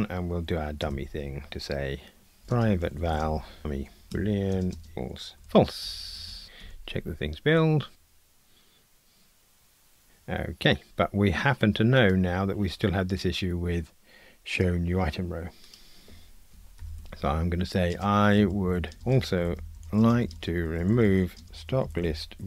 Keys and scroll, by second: 4.1 Tab, 6.6 ctrl+r.